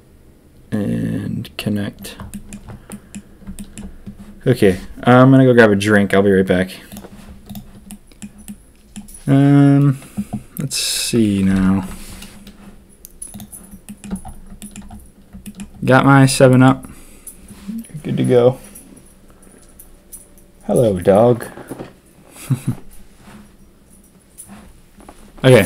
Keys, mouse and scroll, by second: 2.3 middle click, 2.8 middle click, 3.6 shift+click, 7.8-8.2 drag, 8.4-8.9 drag, 11.5 ctrl+KP_3, 13.3 click, 13.8 shift+click.